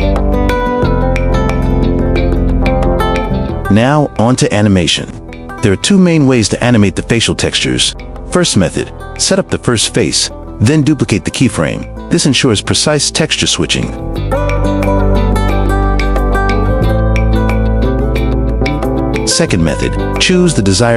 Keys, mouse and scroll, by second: 0.7 click, 1.6 click, 2.6 click, 2.8-4.2 typing, 8.9 drag, 10.0 click, 11.2 shift+d, 13.0 click, 15.8 g, 16.4 g, 16.8 click, 17.6 g, 17.9 g, 18.2 drag, 19.3 shift+middle click, 19.7 g.